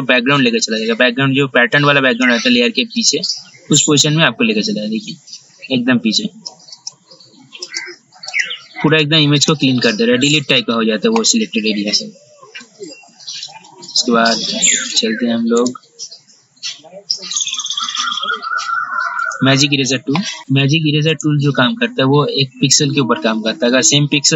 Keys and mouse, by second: 1.9-8.5 drag, 12.8 ctrl+z, 13.9-14.5 typing, 15.7 right click, 19.4 click, 20.4 right click, 21.4-24.3 drag.